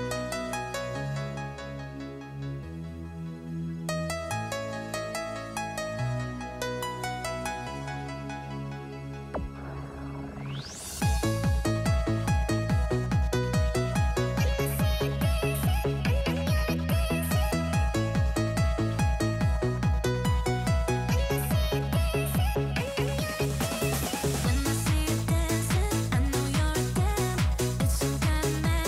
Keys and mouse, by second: 0.4 shift+middle click, 1.2 shift+middle click, 2.9 click, 3.8 KP_7, 6.1 middle click, 6.8 ctrl+z, 7.3-11.9 typing, 10.3 click, 13.0-14.8 typing, 14.0 click, 15.9-16.7 typing, 17.3 click, 18.2 click, 19.0 KP_0, 19.9 middle click, 21.1 shift+middle click, 21.3-24.8 typing, 25.6 click, 26.8-28.5 typing, 27.3 shift+middle click.